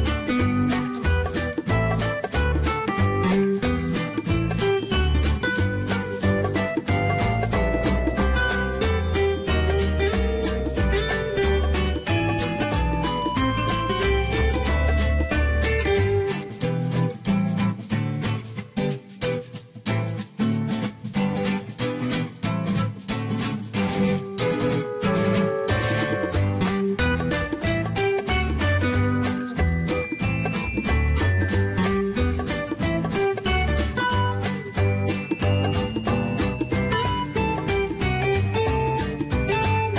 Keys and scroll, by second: 5.9-6.9 typing.